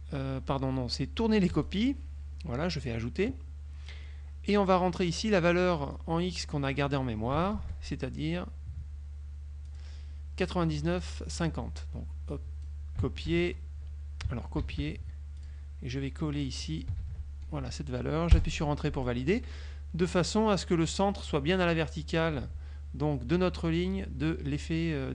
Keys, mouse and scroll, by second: 1.6 click, 2.9 click, 6.0 click, 7.6 ctrl+v, 9.8 click, 12.4 click, 13.4 ctrl+v, 14.8 ctrl+c, 15.5 click, 16.6 click, 17.2 ctrl+v, 18.5 Return.